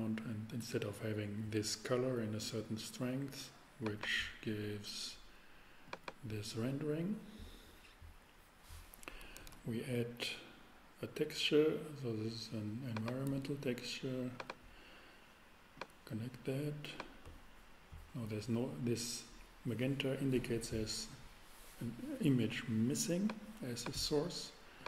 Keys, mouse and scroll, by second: 9.3 shift+a, 9.4 shift+a, 23.4 click.